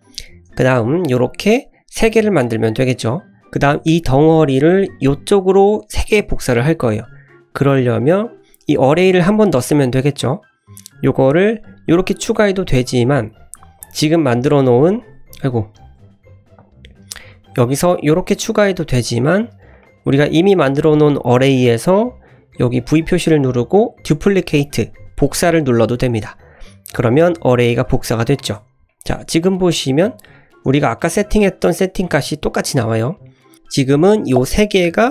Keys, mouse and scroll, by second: 0.2 shift+middle click, 0.7 click, 1.2 click, 8.2 click, 11.3-12.9 drag, 13.0-13.9 drag, 15.3 ctrl+z, 16.5 click, 17.2-19.8 drag, 22.8-27.1 drag, 28.4-28.8 scroll down 3, 28.8 shift+middle click, 29.8 click, 30.3 shift+middle drag, 33.5 click.